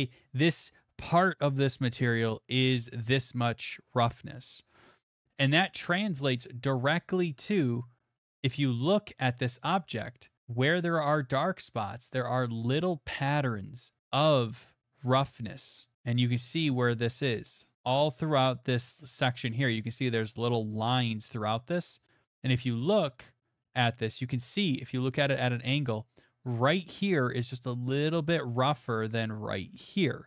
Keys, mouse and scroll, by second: 6.7 click, 7.0-8.1 scroll, 8.1 scroll, 9.3-9.7 scroll, 14.0 scroll, 14.4 middle click, 21.2 scroll, 22.6 middle click, 22.8 middle click, 23.6 middle click, 24.2 middle click, 25.4 middle click, 26.0 middle click.